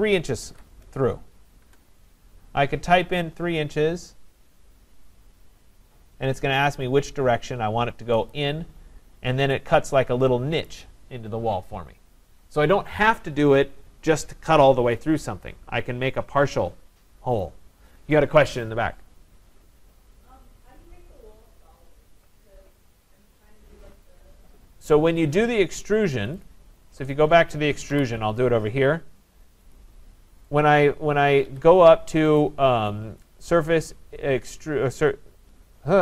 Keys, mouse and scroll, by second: 0.5 shift+', 1.6 Return, 8.3 click, 9.1-9.6 scroll up 1, 9.8-10.2 scroll, 10.7 right click, 24.8 scroll, 25.0 scroll down 4, 25.1-25.6 scroll, 25.6 scroll, 26.4 click, 27.1 click, 27.9 Delete, 29.7 click, 30.6 click, 31.3 Escape, 31.5 Escape, 32.4 click.